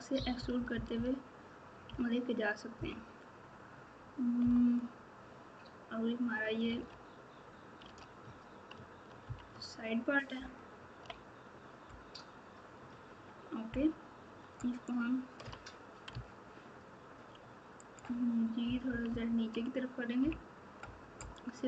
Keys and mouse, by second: 0.1 KP_4, 0.3 KP_4, 1.8 KP_6, 4.4 KP_9, 6.7 alt+z, 7.8 alt+z, 9.2 KP_3, 10.3 ctrl+KP_8, 10.8 ctrl+KP_8, 18.6 KP_6, 18.8 KP_6, 20.2 KP_2.